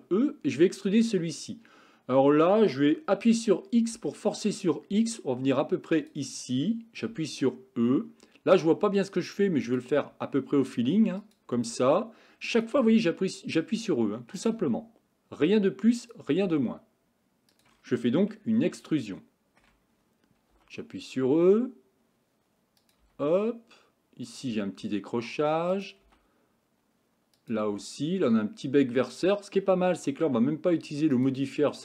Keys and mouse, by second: 7.1 e, 10.0 e, 11.6 e, 12.8 e, 14.6 e, 16.3 e, 18.6-19.7 shift+middle drag, 20.6 e, 23.1 e, 24.5 e, 26.1 e, 27.7 e, 29.8 e.